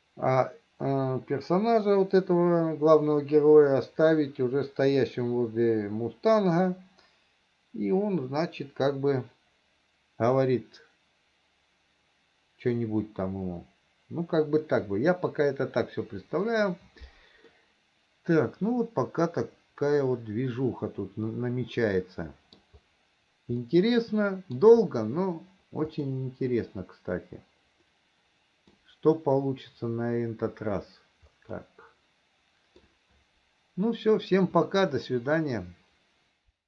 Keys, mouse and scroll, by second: 17.7-23.0 middle drag, 24.0-25.0 middle drag, 26.4-29.1 middle drag, 31.9-33.2 middle drag, 35.1-36.6 middle drag.